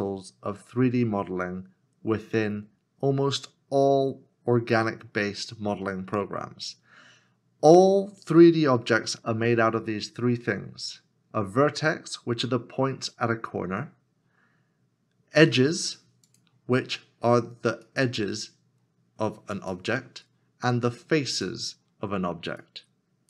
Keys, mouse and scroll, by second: 4.3 scroll up 1.